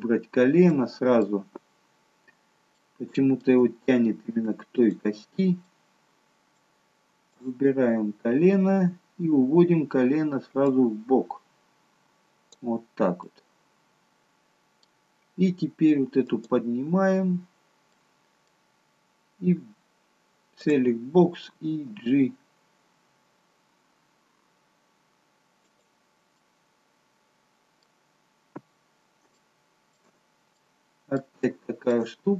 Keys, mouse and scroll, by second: 0.0-0.5 scroll up 3, 0.6 middle click, 2.7 shift+middle click, 2.7 shift+scroll up 1, 4.7 click, 5.7 middle click, 7.3 click, 9.7-10.3 scroll down 2, 11.0 click, 13.7 middle click, 16.2 click, 17.9 middle click, 20.6 click, 21.9 g, 26.3 middle click, 28.1-29.1 scroll up 1, 29.4 shift+middle click, 29.4 scroll up 1, 30.5 middle click, 31.6 shift+middle click, 32.2-32.3 scroll up 1.